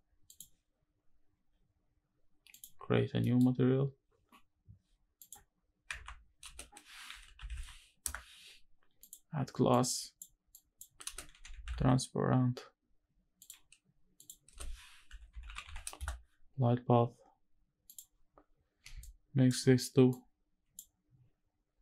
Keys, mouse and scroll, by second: 0.0 click, 2.2 click, 3.6 middle click, 3.6-4.9 scroll down 1, 4.9 click, 6.1 x, 6.1 space, 9.4-9.9 drag, 10.2 click, 10.7 space, 14.2 space, 18.7 ctrl+shift+right click, 19.8 click, 21.7 click.